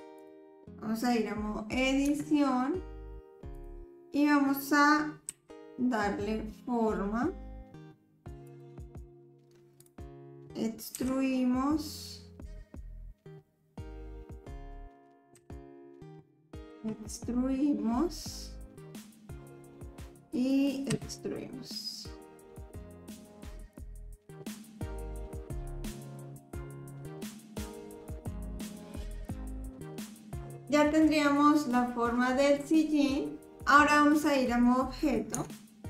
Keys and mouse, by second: 0.2 click, 2.1 Tab, 5.3 e, 9.8 click, 10.9 e, 15.3 KP_7, 16.7 e, 20.9 e, 25.6 click, 26.1 click, 26.6 click, 27.2 click, 28.0 click, 28.5 click, 29.3 click, 29.8 click, 30.5-35.3 drag, 35.3 Tab.